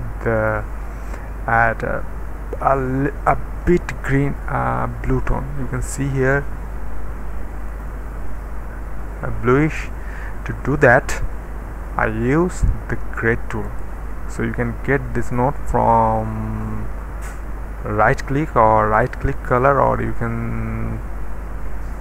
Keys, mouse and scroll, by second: 0.4 click, 4.0 d, 6.2 click, 6.6 d, 7.7 click, 8.0 d, 9.0-10.6 middle drag, 13.6 right click, 18.1 click, 19.0 click, 19.0 right click, 19.5 click.